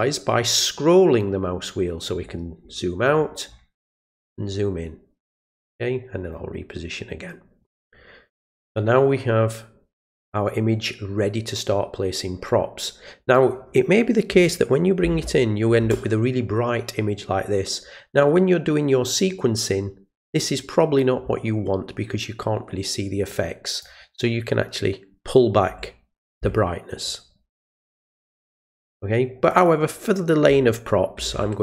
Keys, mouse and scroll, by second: 1.3-2.4 scroll down 1, 2.6-3.1 scroll down 2, 3.1-3.8 scroll up 2, 4.0 scroll up 2, 4.5-4.8 scroll down 1, 4.8-5.6 scroll up 1, 6.3-7.6 middle drag, 13.2 click, 23.3 click, 28.1 click, 29.5 click.